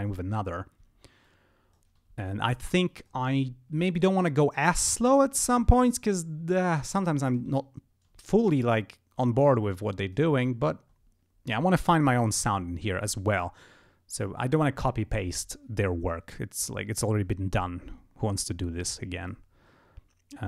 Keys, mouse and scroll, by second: 0.4 ctrl+scroll down 2, 1.2 ctrl+click, 2.3 ctrl+scroll up 2, 2.9 ctrl+click, 3.3 ctrl+scroll down 2, 3.6 ctrl+scroll up 2, 7.6 ctrl+scroll down 2, 7.9 ctrl+scroll up 2, 8.6-10.3 drag, 10.4 ctrl+scroll down 2, 10.6 ctrl+scroll up 2, 11.0 ctrl+scroll down 2, 11.4 ctrl+scroll up 2, 19.2 click, 19.3 ctrl+alt+shift+m.